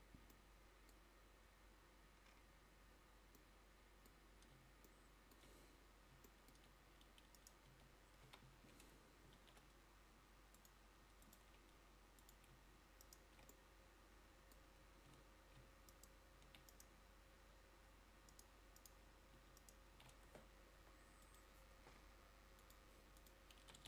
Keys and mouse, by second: 7.9 Tab, 8.4 a, 9.5 ctrl+r, 12.8 click.